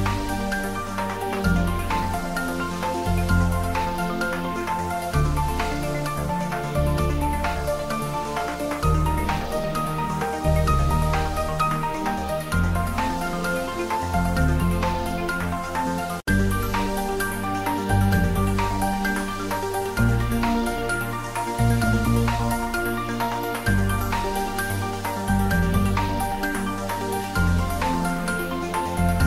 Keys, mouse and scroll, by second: 0.1 ctrl+s, 0.6 ctrl+middle click, 1.0 Tab, 1.2 middle click, 1.9 click, 2.5 3, 2.6 click, 4.6 e, 6.8 click, 6.9 Tab, 7.9 ctrl+r, 8.5 click, 10.4 ctrl+r, 10.7 click, 12.2 click, 12.4 ctrl+z, 13.0 ctrl+r, 13.3 click, 14.2 Tab, 15.9 click, 16.8-18.0 typing, 19.5 Return, 20.2-21.1 typing, 21.5 click, 22.2-23.2 typing, 24.5 click, 24.9 Tab, 25.6 click, 25.9 Tab, 26.5-28.3 typing, 26.8 click.